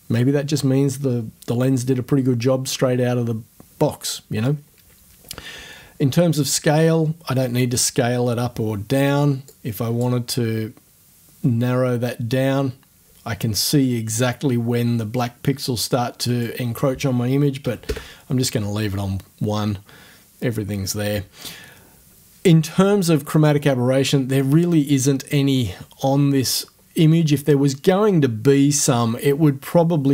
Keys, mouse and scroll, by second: 9.5 click, 16.3 right click, 17.6 KP_1, 17.9 Return, 25.6-26.3 ctrl+scroll up 2.